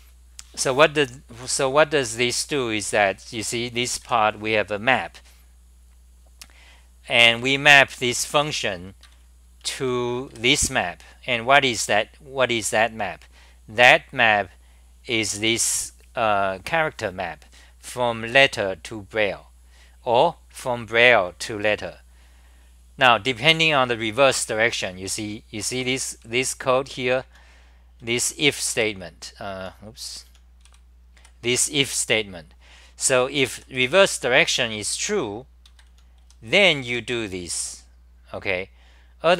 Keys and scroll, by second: 3.5-4.5 typing, 7.4 ctrl+g, 7.8-10.8 typing, 9.0 ctrl+g, 25.9-31.2 typing, 33.1 ctrl+g, 33.3 t, 33.8 1, 35.7 ctrl+g, 35.9-37.3 typing.